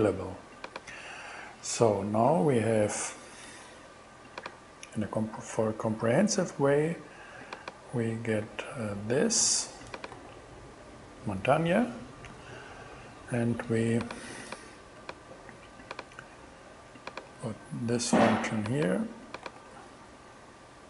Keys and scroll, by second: 8.3 super+c, 10.2 super+v, 17.3 super+x, 19.5 super+v.